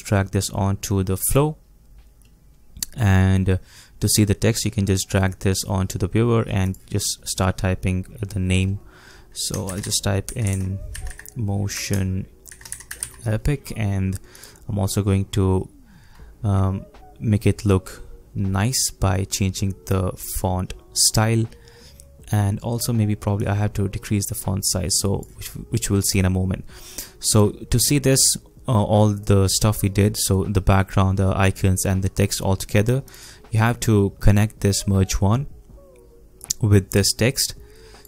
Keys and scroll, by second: 9.6-11.7 typing.